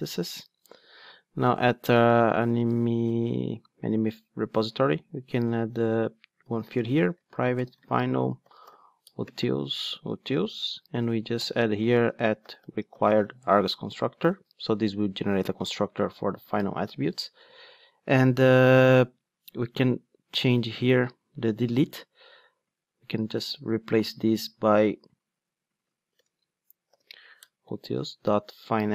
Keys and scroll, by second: 5.9 Tab, 9.0 Tab, 9.6 Return, 14.3 alt+super+l, 27.4 Return.